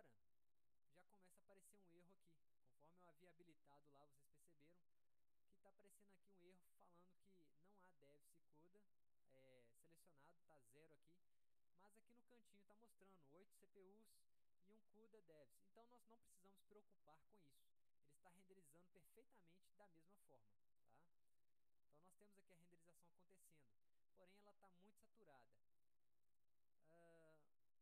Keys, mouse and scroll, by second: 2.6-4.2 drag, 9.1-10.1 drag, 18.0 click.